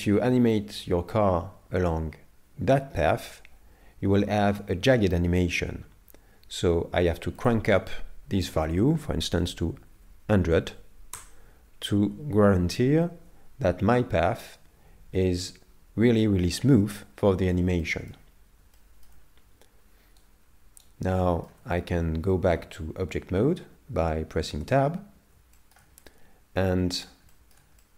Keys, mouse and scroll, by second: 7.4 click, 10.0 KP_0, 15.1 scroll up 1, 17.1 scroll down 1, 17.2-17.8 scroll down 1, 17.8 shift+middle click, 18.4 scroll down 2, 18.8 shift+middle click, 20.2 right click, 21.2 shift+middle click, 22.0 scroll up 2, 24.6 Tab, 25.6 shift+middle click, 26.0 middle click, 27.3 shift+middle click, 27.8 middle click.